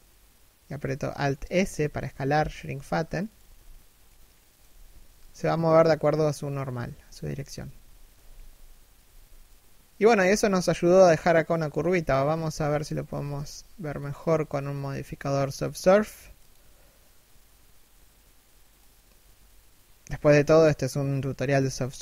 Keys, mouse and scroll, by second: 2.9 z, 3.6 middle click, 4.2 z, 4.5 alt+s, 6.6 3, 7.0 z, 7.3 1, 7.7 z, 9.0 middle click, 10.4 middle click, 11.4 middle click, 11.7 3, 12.2 1, 13.4 scroll up 1, 14.2-15.0 scroll down 1.